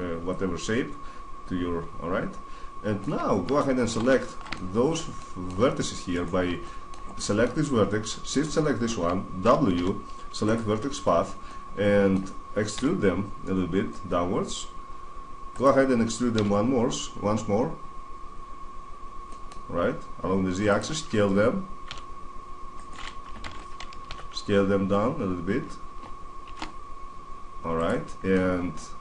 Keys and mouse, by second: 1.1 middle click, 3.9 middle click, 4.7-5.9 middle drag, 8.9-10.1 right drag, 9.5 w, 12.5 e, 15.4-17.2 drag, 16.1 e, 20.5-22.3 drag, 21.6 s, 23.2 alt+o, 23.8 s, 27.6-28.0 drag, 28.0-29.0 middle drag.